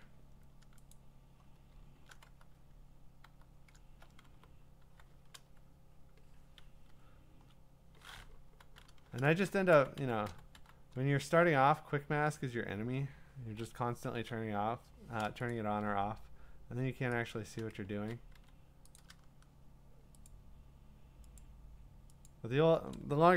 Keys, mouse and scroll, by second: 3.7 click, 3.7-4.0 scroll, 3.7 q, 4.3 b, 5.5 q, 6.9-7.5 [, 8.5 q, 9.7 q, 10.0 q, 10.3 q, 10.5 q, 11.7 q, 13.7 [, 14.1 [, 15.5 click, 17.3 shift+click, 18.0 ctrl+z, 18.3 x, 19.0 click, 20.3 shift+click, 21.4 click, 22.3 shift+click, 23.0 shift+click.